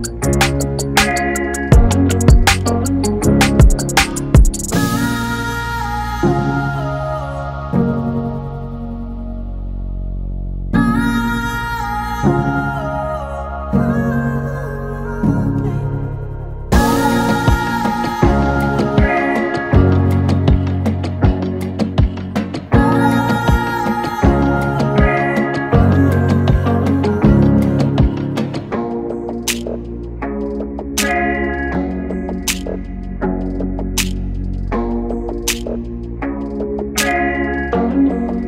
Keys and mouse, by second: 1.4 shift+Tab, 4.6 click, 6.8 click, 11.7 click, 15.3 click, 24.0 click, 28.4 click, 36.3 click.